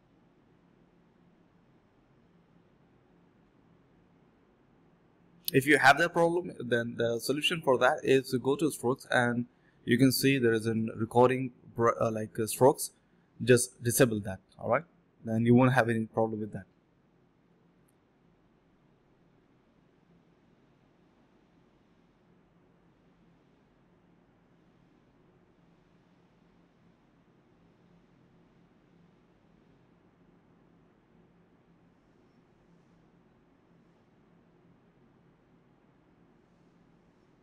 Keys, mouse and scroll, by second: 0.5 double click, 0.8 typing, 1.5 double click, 6.7 alt+click, 7.2 double click, 8.6 double click, 8.6 shift+click, 8.7 shift+double click, 8.8 shift+click, 9.3 shift+click, 9.4 shift+double click, 9.5 shift+click, 10.5 double click, 11.3 shift+click, 11.4 shift+double click, 11.5 shift+click, 12.2 alt+click, 12.4 alt+click, 12.5 alt+click, 12.8 alt+click, 13.0 alt+click, 13.3 alt+click, 14.3 alt+click, 14.5 alt+double click, 14.7 alt+double click, 14.8 alt+double click, 15.2 typing, 15.5 double click, 15.7 shift+click, 15.8 shift+double click, 16.0 alt+double click, 16.1 alt+click, 16.5 double click, 18.0 shift+click, 18.1 shift+double click, 18.2 shift+click, 19.0 alt+click, 20.0 shift+click, 20.8 double click, 21.6 shift+click, 21.7 shift+double click, 22.9 alt+double click, 23.1 alt+click, 23.3 alt+click, 23.7 alt+click, 25.0 double click, 28.1 double click, 28.2 shift+click, 29.3 alt+click, 30.1 typing, 30.6 double click, 31.1 shift+click, 31.2 shift+double click, 31.6 double click, 32.1 shift+click, 32.2 shift+double click, 32.3 shift+click, 32.8 double click, 33.6 shift+click, 33.7 shift+double click, 33.7 shift+click, 34.2 alt+click, 34.4 alt+click, 34.5 alt+click, 35.1 alt+click, 36.2 f, 37.0 ctrl+shift+click.